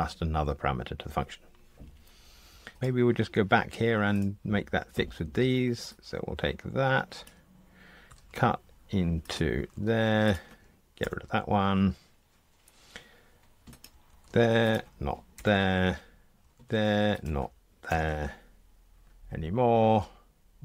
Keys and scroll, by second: 9.5 super+v, 11.0 super+BackSpace, 14.0 super+v, 15.3 super+BackSpace, 16.5 super+v, 17.8 super+BackSpace.